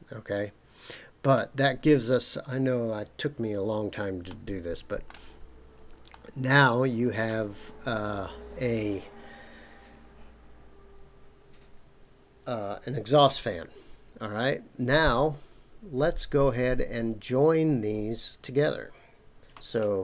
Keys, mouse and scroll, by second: 1.6 scroll down 2, 4.3-5.1 middle drag, 5.4-6.1 scroll down 2, 6.1-7.3 middle drag.